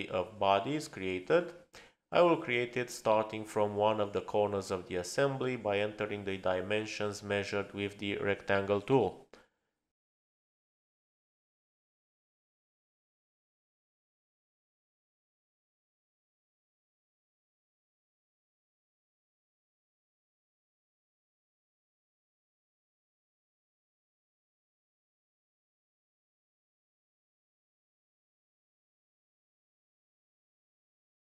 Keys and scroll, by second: 6.4-9.1 typing, 9.6 Return, 15.3 Return, 16.5 space, 18.8 p, 19.9 Return, 25.7 Return.